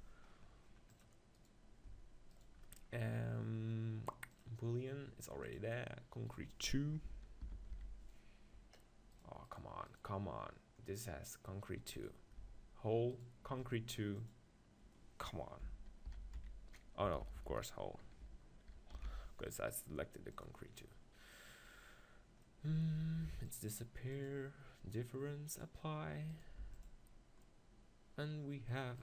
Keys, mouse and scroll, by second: 0.1 right click, 1.4-8.8 right drag, 9.5-20.1 right drag, 20.5 BackSpace, 22.5-24.3 middle drag, 24.3-27.1 drag, 26.3 right click, 26.6 x, 27.4-29.0 middle drag.